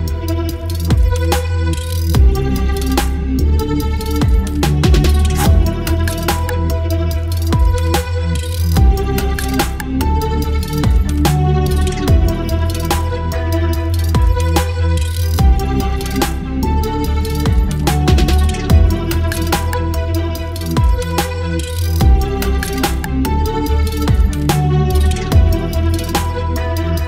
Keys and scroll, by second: 1.2 ctrl+BackSpace, 1.8 ctrl+BackSpace, 3.0 space, 4.9 Delete, 5.4 space, 8.1 Delete, 9.0 Delete, 10.5 ctrl+BackSpace, 11.6 Delete, 12.5 Delete, 13.2 Delete, 14.2 space, 16.2 Delete, 17.0 space, 17.6 ctrl+BackSpace, 18.8 Delete, 19.7 space, 20.0 v, 21.8 space, 23.6 Delete, 25.4 ctrl+BackSpace.